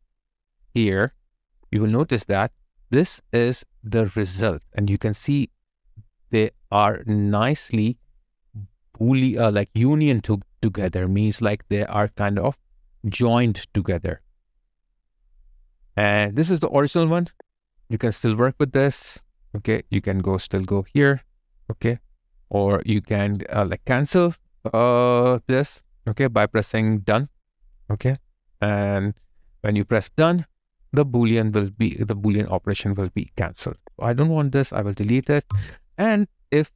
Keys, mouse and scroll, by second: 3.3 alt+right click, 3.9 alt+click, 4.6 alt+right click, 7.9 alt+right click, 8.4 alt+click, 9.2 alt+right click, 10.8 alt+click, 14.8 alt+click, 17.1 double click, 23.2 right click, 31.8 alt+right click, 32.3 alt+click, 35.3 Delete.